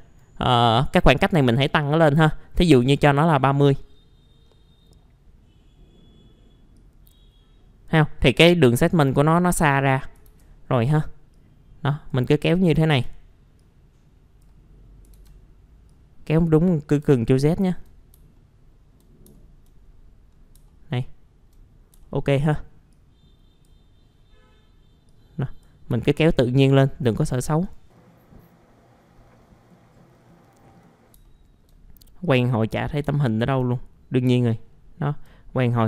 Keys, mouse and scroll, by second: 2.6 KP_3, 2.7 KP_0, 3.8 middle click, 4.4-5.3 scroll down 1, 5.3-5.9 scroll up 1, 6.8 click, 10.3 ctrl+z, 11.3-12.6 drag, 12.9 ctrl+z, 13.6 click, 15.1 ctrl+z, 15.9 click, 18.3 alt+middle click, 19.3 alt+middle click, 19.8-20.3 scroll up 1, 20.3 scroll down 1, 20.7 alt+middle click, 22.0 alt+middle click, 22.9-25.9 drag, 26.0 alt+middle click, 27.2 click, 27.9 middle click, 28.2 click, 28.6 click, 29.2 scroll down 1, 29.3 middle click, 29.5 scroll up 1, 29.5 middle click, 29.7 scroll down 1, 29.8 alt+middle click, 30.4 middle click, 30.4 scroll down 1, 30.5 click, 30.9 alt+middle click, 30.9 click, 31.3 alt+middle click, 32.2 click, 33.1 alt+middle click, 34.4 alt+middle click.